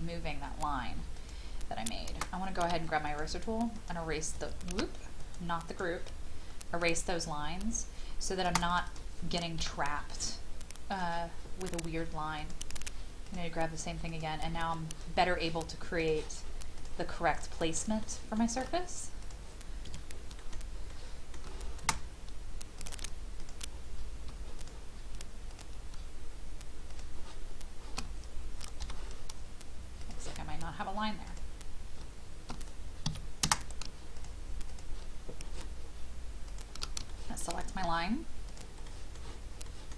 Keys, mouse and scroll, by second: 1.1 click, 2.6 e, 3.0 click, 4.7 ctrl+z, 5.2 click, 8.6 space, 8.7 click, 9.6 m, 17.6 scroll down 1, 18.0 shift+middle click, 19.2 click, 19.9 Escape, 20.4 middle click, 22.8 click, 23.4 shift+click, 24.6 click, 26.9 shift+click, 28.8 shift+i, 30.0 click, 33.0 Escape, 34.2 shift+click, 34.7 shift+click, 36.5 shift+click, 37.1 shift+middle click, 37.5 scroll down 1, 38.5 shift+click, 38.9 shift+middle click, 39.6 shift+middle click.